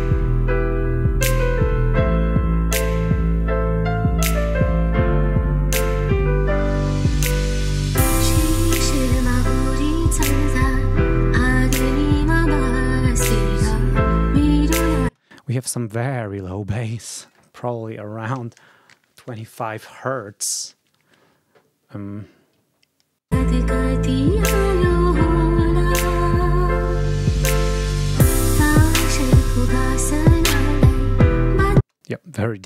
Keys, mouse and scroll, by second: 1.4 alt+Tab, 3.1 alt+click, 3.3 right click, 4.8 click, 5.5 click, 6.3 scroll up 2, 7.4 scroll up 2, 23.2 space, 31.6 space.